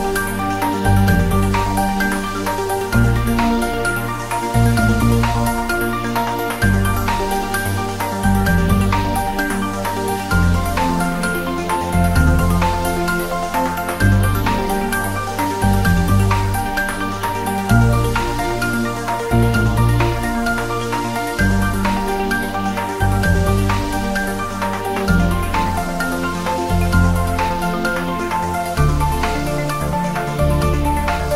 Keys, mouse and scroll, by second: 0.6 click, 0.9-3.4 typing, 1.3 click, 1.8 click, 2.5 click, 4.1-4.9 click, 5.1 scroll up 1, 6.4-6.7 click, 6.8 scroll up 1, 7.4 click, 9.9 scroll down 1, 10.8 click, 11.5 s, 12.0 click, 12.1 scroll down 1, 12.8 click, 13.6 scroll down 1, 13.8 click, 14.3 s, 14.6 click, 14.8 g, 15.0 click, 16.4 scroll up 1, 16.6-22.3 typing, 17.6 click, 19.3 click, 19.5 ctrl+z, 19.6 click, 21.4 click, 22.1 click, 22.3 scroll up 1, 23.1-23.7 click, 23.8 scroll up 1, 25.5-26.2 click, 26.2-26.8 scroll down 1, 27.0-27.6 drag, 30.9 scroll up 1.